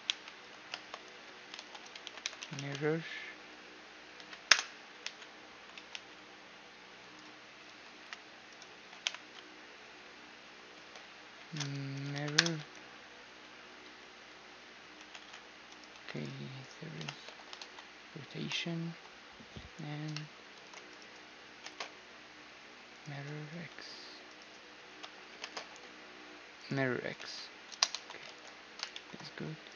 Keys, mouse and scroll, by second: 0.3 space, 2.2 r, 7.3 r, 8.6 ,, 10.3 space, 15.5 x, 16.3-18.2 right drag, 16.7 ctrl+space, 17.2 ctrl+a, 20.2 shift+d, 21.3 space, 24.6 ., 25.0 space, 27.5 a, 28.0 ctrl+s, 28.5 middle click, 29.3-29.7 right drag, 29.5 Tab.